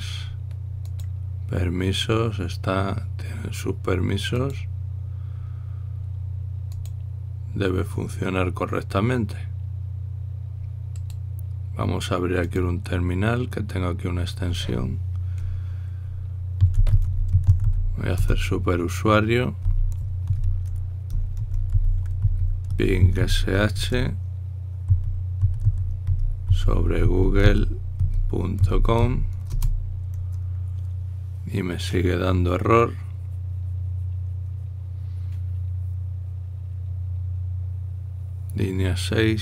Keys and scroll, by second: 17.1-18.9 typing, 20.3-30.2 typing.